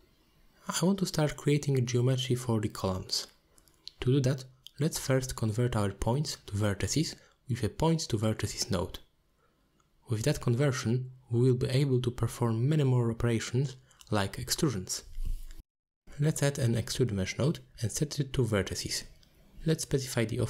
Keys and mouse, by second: 2.2 alt+shift+g, 2.4 alt+shift+click, 2.9 middle click, 3.7 shift+a, 6.7 BackSpace, 12.7-13.5 drag, 13.6 click, 15.6 shift+a, 19.4-20.2 drag.